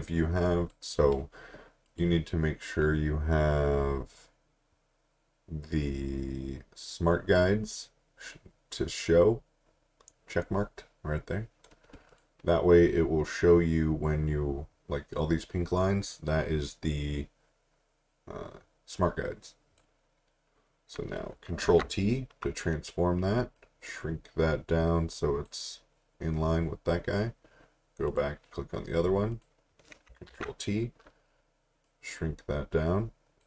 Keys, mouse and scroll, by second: 12.1 click, 21.6 t, 23.6 click, 28.1 click, 30.3 t, 31.8 click.